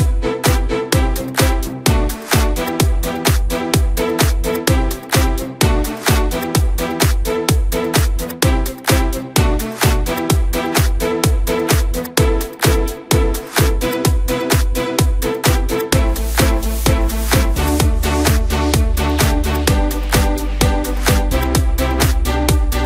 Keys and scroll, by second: 0.2 ctrl+alt+z.